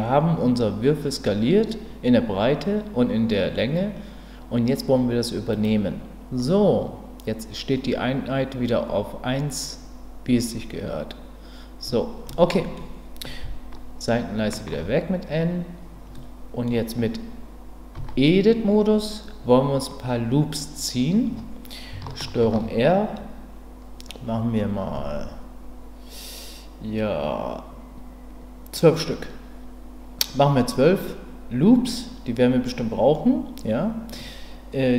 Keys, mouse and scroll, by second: 12.3-12.7 middle drag, 14.7 n, 16.1 middle click, 17.9 Tab, 22.4 ctrl+r.